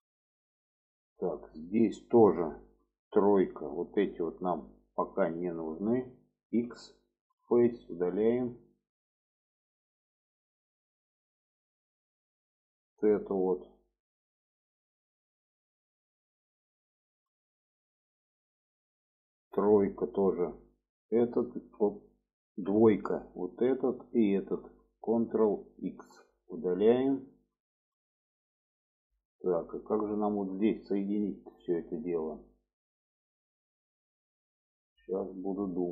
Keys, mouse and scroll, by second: 0.2 middle click, 1.3 shift+middle click, 3.7 3, 4.9 shift+click, 5.5 shift+click, 6.8 x, 8.5 middle click, 9.3 middle click, 9.9 shift+middle click, 10.6 middle click, 11.3-11.6 shift+middle drag, 12.3 middle click, 13.4 middle click, 14.7 middle click, 15.4 shift+middle click, 16.2 middle click, 17.0 shift+middle click, 18.1 shift+middle click, 19.6 3, 19.9 middle click, 21.2 alt+shift+click, 22.0 click, 22.6 2, 23.4 alt+shift+click, 24.2 alt+shift+click, 26.1 ctrl+x, 27.0 middle click, 27.8 shift+middle click, 28.6 middle click, 29.4 shift+middle click, 29.8 middle click, 30.4 shift+middle click, 31.3 middle click, 31.8 shift+middle click, 33.0 shift+middle click, 34.6 middle click, 35.2 shift+middle click.